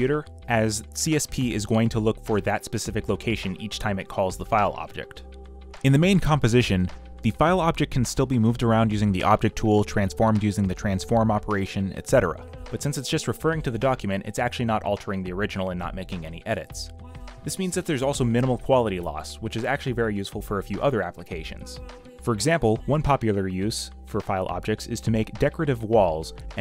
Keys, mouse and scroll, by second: 2.7 ctrl+j, 2.9 v, 3.8 ctrl+t, 7.0 ctrl+z, 8.6 ctrl+t, 9.8 Return, 10.3 v, 11.6 v, 11.8-12.7 scroll down 2, 13.1 v, 13.3 middle click, 14.2-14.7 middle drag, 14.7 v, 15.9-16.6 scroll up 2, 16.6 middle click, 18.6 ctrl+t, 22.4 Return, 26.1 ctrl+t.